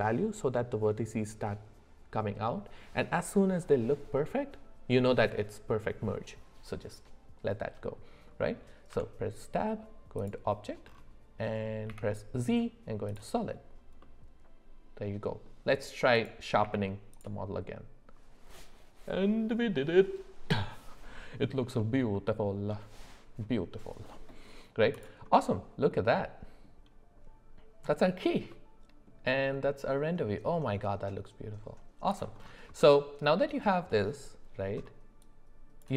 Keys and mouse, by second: 7.6 middle click, 8.4 middle click, 8.9 Tab, 11.9 z, 14.0-15.4 middle drag, 16.1 click, 16.6 q, 22.1 middle click, 25.3-26.6 middle drag, 28.5-29.1 middle drag, 30.6 middle click, 32.8-33.9 middle drag.